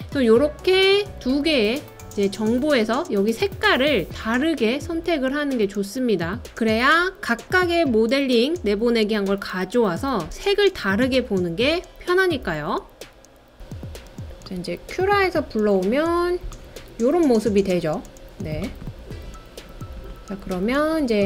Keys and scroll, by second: 4.1-4.8 typing.